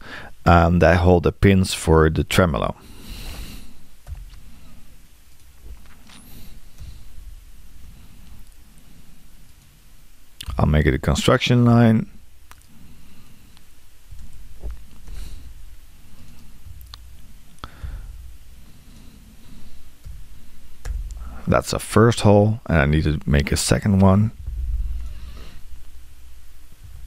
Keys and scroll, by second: 4.1 l, 6.8 8, 10.5 x, 13.9-14.6 typing, 24.3 l, 26.9 3.